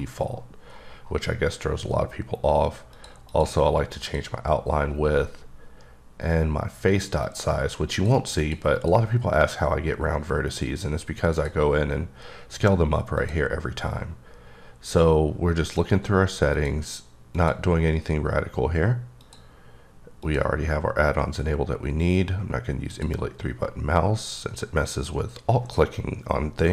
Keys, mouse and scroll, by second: 1.6-2.9 scroll up 1, 2.9 click, 3.3 click, 4.0 click, 4.9-5.6 scroll down 6, 5.6-6.9 scroll up 3, 6.9 click, 7.2 click, 7.9 click, 8.1 double click, 8.4 click, 8.8 click, 11.3 click, 13.2 click, 16.5 click, 17.3 click, 19.2 click, 20.2 click, 22.9 click.